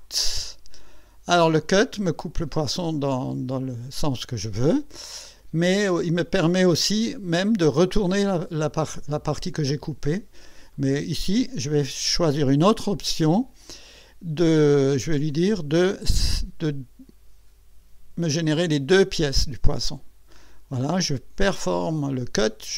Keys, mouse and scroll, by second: 0.5 click, 5.1 scroll up 1, 8.5 click, 10.7 click, 15.8 click.